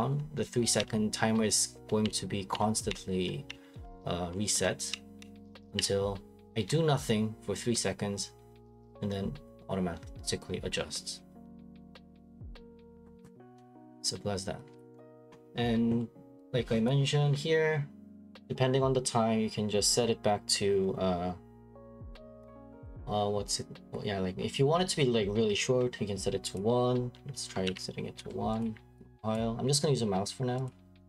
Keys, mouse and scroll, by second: 13.5 Escape, 14.9 click, 15.6-16.9 scroll, 16.9 click, 16.9 scroll, 26.5 click, 27.6 typing, 28.2 Return, 28.6 click, 29.3 click, 30.6 click.